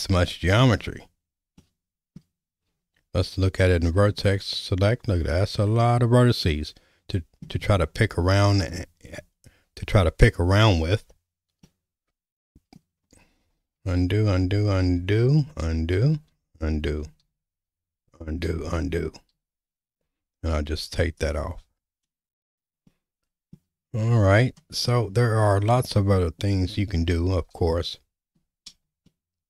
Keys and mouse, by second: 1.6 middle click, 4.1 Tab, 5.3 click, 5.8-7.4 middle drag, 11.6-12.8 middle drag, 13.8 ctrl+z, 14.0 ctrl+z, 14.3 ctrl+z, 14.9 ctrl+z, 15.6 ctrl+z, 16.4 ctrl+z, 17.2 ctrl+z, 18.5 ctrl+z, 19.3 ctrl+z, 21.2 click, 22.9 middle click, 24.3 click, 24.9 middle click, 29.1-29.4 shift+middle drag.